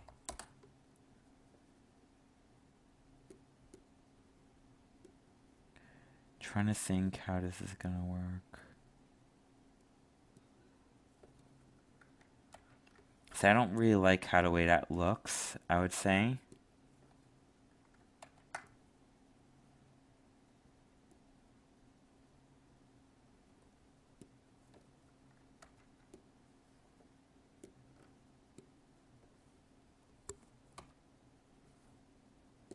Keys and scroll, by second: 12.5 ctrl+z, 18.2 ctrl+z, 25.6 ctrl+z.